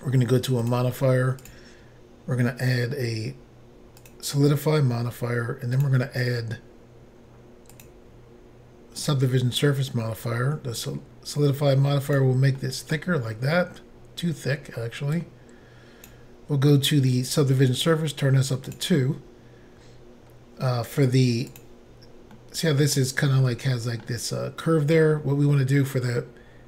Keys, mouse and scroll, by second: 0.6 click, 1.4 click, 4.0 click, 4.1 click, 5.8 click, 5.9 click, 7.8 click, 7.9 click, 9.1 click, 9.1 click, 10.8 click, 12.6 middle click, 15.2 click, 18.7 click, 19.5 scroll up 2, 20.3 scroll down 1, 21.5 click, 22.4 middle click, 23.4 middle click, 26.2 scroll down 2.